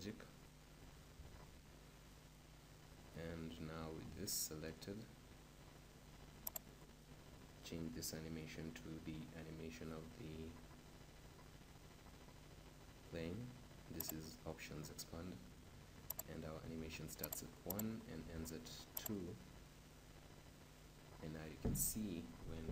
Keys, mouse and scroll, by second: 3.3-18.3 right drag, 18.3-19.5 drag, 22.6 p.